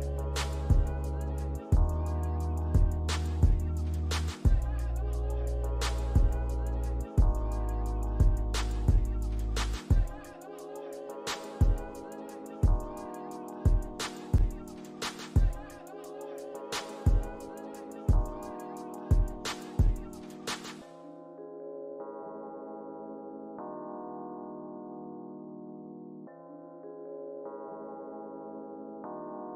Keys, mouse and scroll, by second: 1.6 double click, 6.7 double click, 7.2 alt+click, 9.9 click, 9.9 alt+scroll down 1, 10.3 scroll up 1, 10.4 scroll down 1, 10.9 alt+middle click, 11.2 alt+click, 11.8 alt+middle click, 12.1 scroll down 1, 13.1 alt+click, 14.8 scroll up 1, 15.7 double click, 17.0-19.2 typing, 17.9 scroll up 1, 18.8 alt+click, 19.8 alt+scroll down 1, 20.7 alt+middle click, 22.6 alt+middle click, 23.1 alt+click, 24.6 ctrl+c, 25.4 typing, 28.0 ctrl+v, 28.4 middle click, 29.2 scroll down 1.